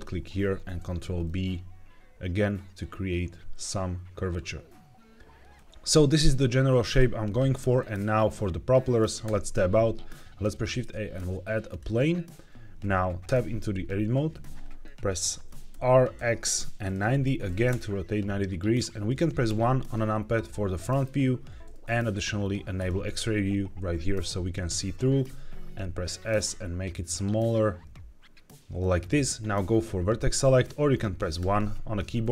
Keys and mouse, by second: 0.4 ctrl+b, 6.6 middle click, 7.7 middle click, 9.1 Tab, 10.3 shift+a, 13.2 Tab, 15.6 r, 16.0 x, 16.7 KP_9, 16.8 KP_0, 17.6 KP_Enter, 19.4 KP_1, 20.4 shift+middle click, 22.6 click, 25.1 s, 28.7 click, 31.3 1.